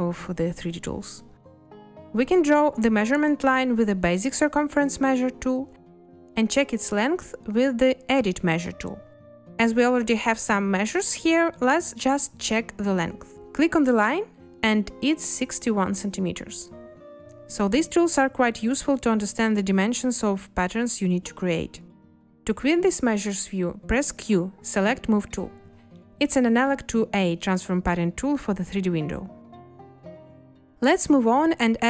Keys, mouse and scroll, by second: 24.0 q.